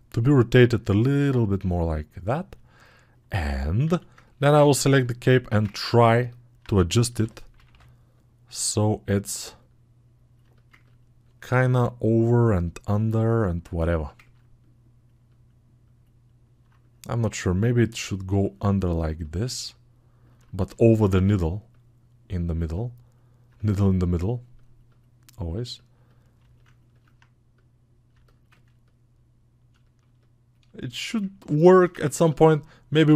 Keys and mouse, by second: 2.4-5.1 alt+drag, 3.7 alt+q, 10.6-19.7 ctrl+alt+drag, 29.6-33.1 alt+shift+drag.